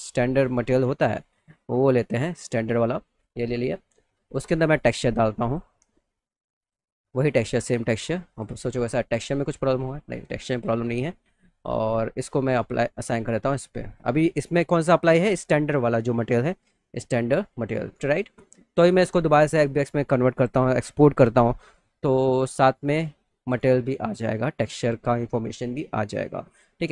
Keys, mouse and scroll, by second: 0.2 click, 2.4 click, 2.6 click, 5.4 click, 6.6 click, 6.7 click, 8.3 click, 8.5 click, 10.3 click, 11.2 click, 12.9 click, 13.9 click, 14.4 click, 14.9 click, 16.1 click, 19.3 click.